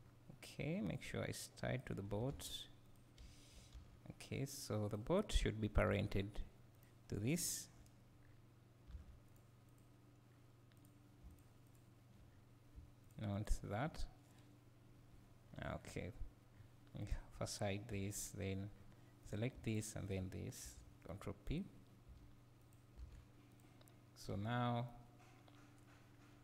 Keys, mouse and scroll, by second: 0.0 scroll up 1, 1.0-2.9 drag, 2.1 s, 3.2 `, 4.3 scroll up 1, 5.0 click, 7.5 shift+click, 8.2 scroll down 1, 8.9 alt+a, 9.4 click, 10.3-10.8 scroll up 2, 10.8 click, 11.4 shift+click, 12.3-13.1 scroll down 2, 13.5 shift+click, 15.5 scroll up 1, 16.5 scroll down 1, 17.1 click, 17.9 h, 18.7 scroll up 1, 19.3 click, 23.0 alt+a, 23.6 click, 24.3 r, 24.9 right click, 25.9 scroll down 1.